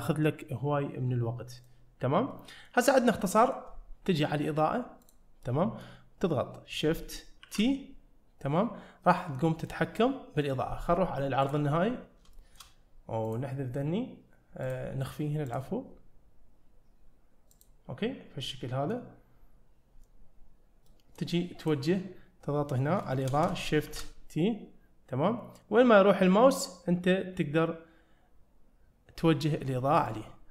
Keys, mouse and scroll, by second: 1.6 click, 2.3 middle click, 3.0 scroll down 1, 3.2 middle click, 5.0 click, 5.5-5.8 middle drag, 7.5 shift+t, 11.5 click, 12.0-12.3 scroll up 2, 12.4 shift+middle click, 13.3 click, 14.7 click, 17.6 click, 18.1-18.5 scroll down 2, 18.5 middle click, 20.9 middle click, 21.6 click, 22.1-23.0 scroll up 1, 23.1 shift+middle click, 23.9 shift+t.